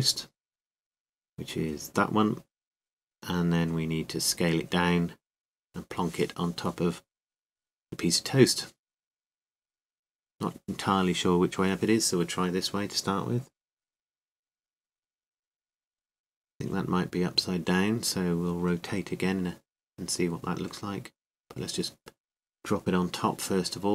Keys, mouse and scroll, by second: 8.3 s, 10.7 r, 16.5 r, 20.5 s.